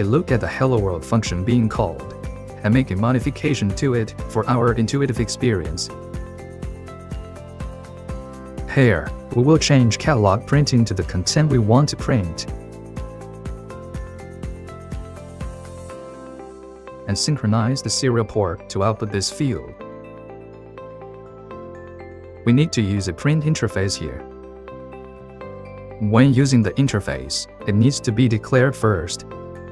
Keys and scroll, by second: 5.5 ctrl+2, 7.1 Left, 10.3 ctrl+2, 10.3 Left, 10.6-11.4 typing, 14.9-16.6 typing, 29.4-29.7 typing.